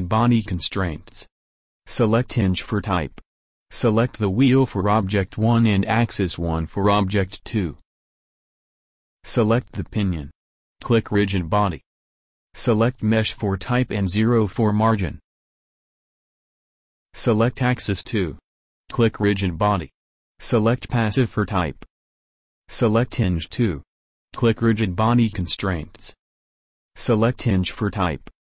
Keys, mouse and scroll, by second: 0.9-2.8 drag, 3.3-4.7 drag, 4.9-6.4 drag, 9.5-10.5 drag, 10.5-12.8 middle drag, 12.8 click, 13.1-14.6 drag, 18.4-23.3 middle drag, 23.3 click, 24.1-27.0 drag, 27.1-28.5 drag.